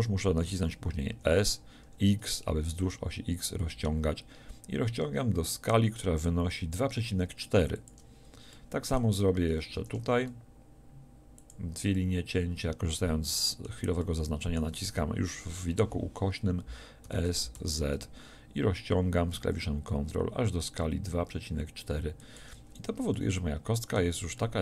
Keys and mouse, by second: 1.1 s, 9.8 ctrl+r, 11.5-17.0 drag, 17.0 s, 22.4 click.